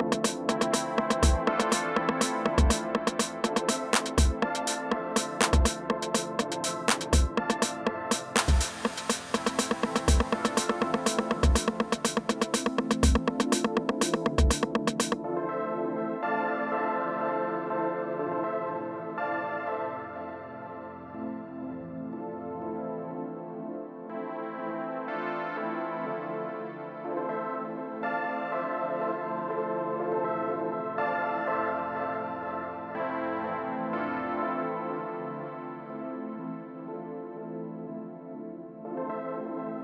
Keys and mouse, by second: 0.3-2.0 drag, 2.0-4.0 middle drag, 4.0 alt+w, 10.4-11.4 middle drag, 11.7 alt+w, 15.2-18.7 drag, 18.0 2, 18.9-22.1 drag, 22.1 middle click, 22.3 f, 22.8-27.7 drag, 22.8 g, 26.7-29.0 middle drag, 29.0-35.8 drag, 36.5 middle click, 37.3 middle click.